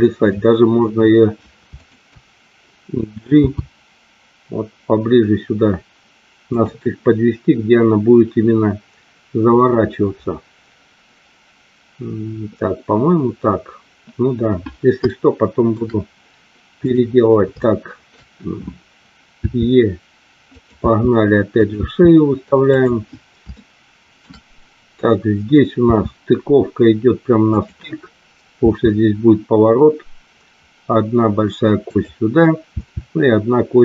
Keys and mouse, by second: 1.6 shift+click, 3.2 g, 6.4 click, 15.0 shift+middle click, 16.8 click, 17.6 shift+middle click, 19.4 e, 20.5 click, 20.9 e, 21.5 click, 22.6 click, 22.6 e, 23.5 shift+middle click, 25.9 e, 27.5 click, 28.5 e, 31.9 click, 32.6 e.